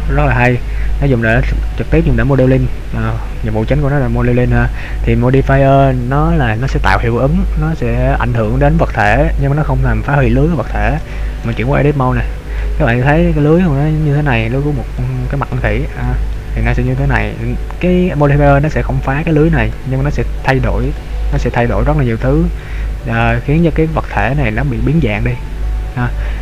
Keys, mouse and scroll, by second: 9.6-10.1 scroll up 3, 10.2 middle click, 11.9 Tab, 12.7 middle click, 14.4 scroll down 2, 15.0 middle click, 16.0 middle click, 19.9 right click, 21.0 right click, 21.3 middle click, 23.0 middle click.